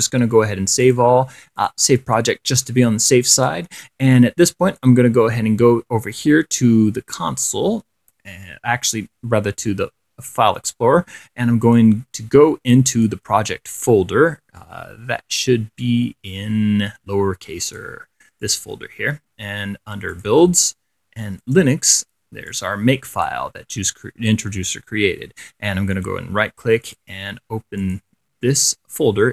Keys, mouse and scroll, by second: 0.1 click, 1.1 click, 1.8 click, 3.5 click, 4.9 click, 11.9 click, 13.1 click, 17.9 click, 18.7 click, 20.4 click, 21.6 click, 22.7 click, 26.2 right click, 26.3 click, 27.1 click, 28.0 click.